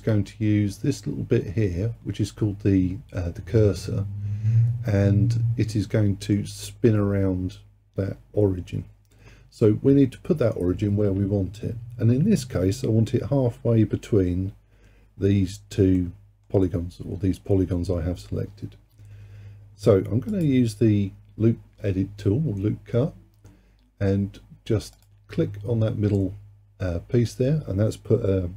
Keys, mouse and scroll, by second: 6.0-9.1 middle drag, 16.0-19.0 middle drag, 20.3-23.4 drag, 25.0-28.1 drag.